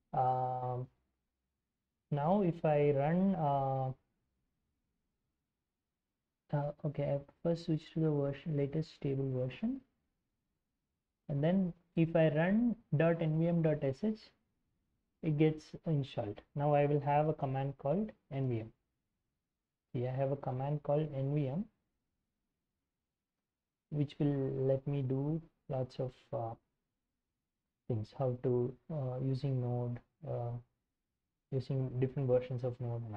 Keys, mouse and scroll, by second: 0.0-2.0 typing, 0.2 Return, 2.2 Return, 2.7 ctrl+l, 3.4-4.1 typing, 8.4 ctrl+click, 8.5 ctrl+c, 8.8 alt+Tab, 9.2 ctrl+shift+v, 9.4 Return, 10.5 alt+Tab, 12.3-14.0 drag, 13.6 ctrl+c, 14.1 alt+Tab, 14.6 ctrl+shift+v, 15.1 Return, 16.7-19.3 typing, 19.6-20.1 scroll up 1, 20.1 ctrl+-, 20.3 ctrl+-, 20.4 ctrl+-, 20.6 ctrl+-, 20.7 ctrl+-, 20.9 ctrl+-, 21.1-23.2 ctrl+-, 21.2-23.5 typing, 24.4-28.3 scroll up 3, 29.5-32.0 drag, 32.3 click.